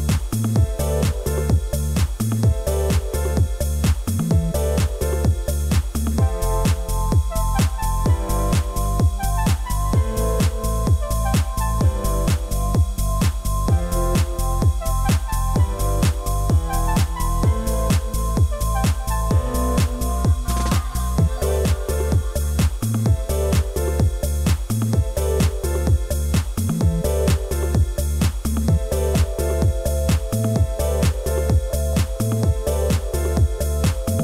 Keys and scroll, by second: 18.8 ctrl+t.